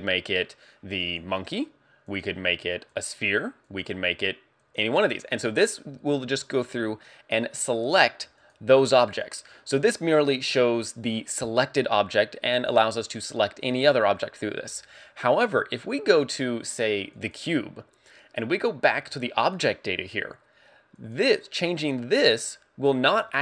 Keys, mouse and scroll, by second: 2.1 click, 3.7 click, 8.4 click, 10.2 click, 17.1 click, 19.4 click, 20.9 click.